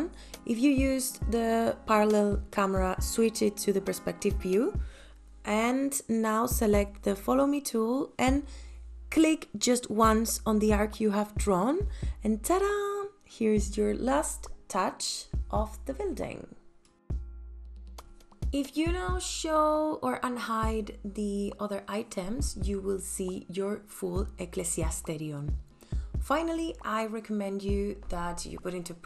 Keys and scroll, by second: 12.2 space, 19.4 m, 21.0 space.